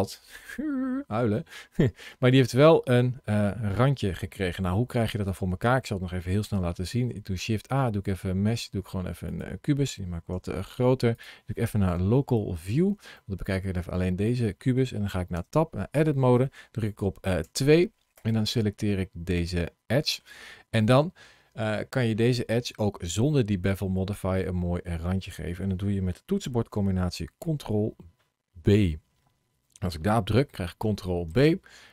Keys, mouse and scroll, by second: 0.7-1.7 scroll down 1, 1.7-2.8 scroll down 1, 2.8 middle click, 5.1 shift+right click, 6.8 shift+a, 10.2 s, 11.0 click, 12.5 scroll down 2, 13.0 middle click, 15.2 Tab, 17.3 2, 18.0 click, 18.8 middle click, 24.4 scroll down 1, 24.7 scroll up 1, 28.4 ctrl+b.